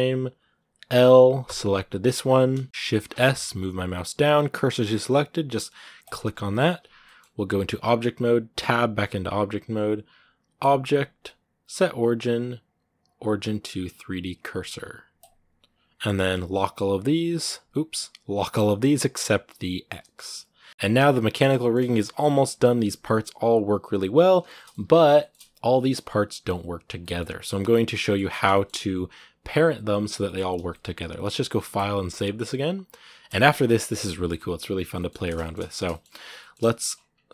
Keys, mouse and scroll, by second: 2.4-5.9 shift+middle drag, 6.2 scroll up 1, 6.3-8.4 middle drag, 8.4 Tab, 16.9-20.2 drag, 20.2 right click, 20.6 middle click, 20.7 r, 21.4 shift+middle click, 21.5-22.1 scroll down 5, 21.8 right click, 22.1 shift+middle click, 22.4 r, 23.4 right click, 23.6 r, 24.3 shift+middle click, 24.6 r, 25.0 shift+middle click, 25.1-26.1 scroll up 2, 26.1 right click, 26.8 middle click, 27.7 scroll up 1, 27.7-29.1 middle drag, 29.1-29.6 scroll down 1, 30.0-36.0 middle drag, 36.0 scroll up 2, 36.2 shift+middle click, 36.7 scroll up 2.